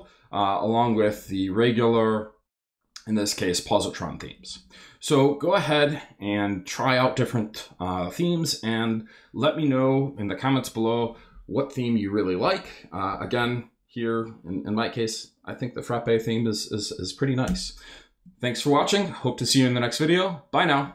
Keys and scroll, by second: 0.8 Up, 4.1 Down, 12.4 Up, 17.4 Return, 18.2 shift+Return.